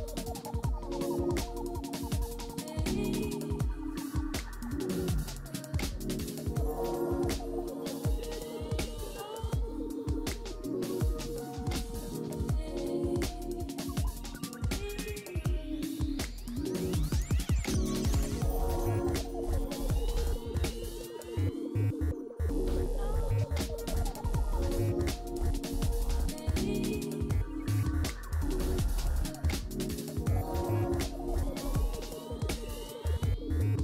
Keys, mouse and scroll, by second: 9.3-11.9 typing, 19.7-20.6 scroll down 1, 20.6-24.0 scroll down 10, 24.0-24.5 scroll down 2, 24.5-26.2 scroll down 7, 26.2-27.3 scroll down 2.